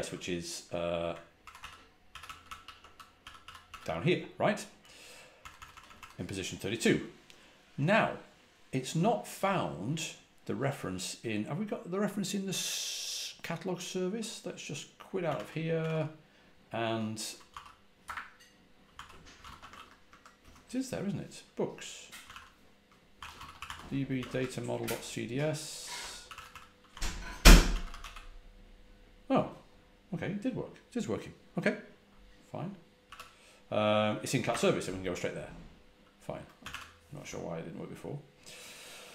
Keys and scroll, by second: 1.3 ctrl+w, 1.7-4.0 typing, 5.3-5.8 typing, 14.9-16.2 typing, 17.4-20.3 typing, 21.9-28.4 typing, 32.9 typing, 34.4 typing, 36.2-37.1 typing.